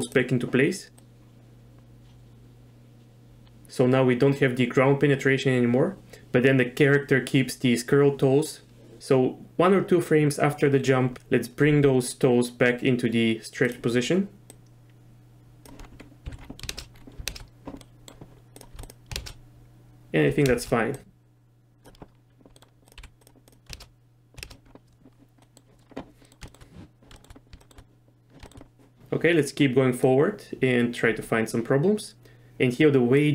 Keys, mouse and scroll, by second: 1.0-3.5 drag, 3.5-9.0 right drag, 11.1 KP_3, 11.7 r, 14.5-15.4 drag, 15.4 middle click, 16.2 z, 16.7 shift+space, 17.3 shift+space, 17.8 middle click, 18.8 click, 19.1 shift+space, 20.5 shift+space, 21.0 click, 22.6 middle drag, 22.9 click, 23.0 g, 23.5 click, 23.7 shift+space, 24.4 shift+space, 25.4 click, 26.2 middle click, 26.5 shift+middle click, 27.6 shift+middle click, 30.1-32.5 drag, 33.2-33.3 drag.